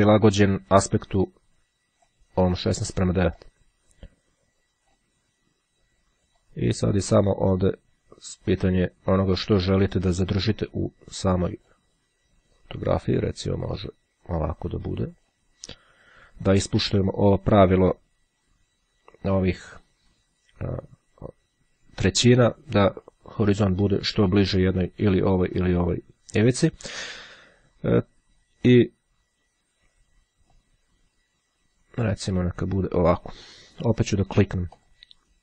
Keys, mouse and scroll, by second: 3.6-5.6 drag, 6.6-12.3 drag, 12.8-15.9 drag, 30.2-33.8 drag, 34.2-35.4 drag.